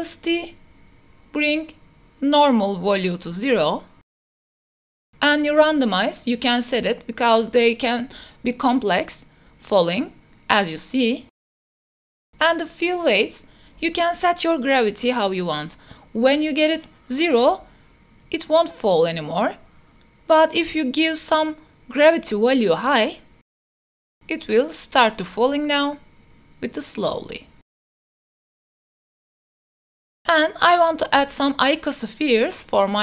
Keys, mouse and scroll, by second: 0.4 click, 2.1-3.7 drag, 3.9 space, 7.1 click, 7.1 space, 8.3 space, 9.5-10.9 drag, 11.7 space, 13.1 click, 14.6-16.1 drag, 16.2 space, 20.0-28.5 drag, 29.5-30.1 middle drag, 30.7 shift+middle drag, 31.1 click, 31.3-31.9 middle drag, 31.7 ctrl+shift+s, 32.0-32.3 drag, 32.6 shift+a.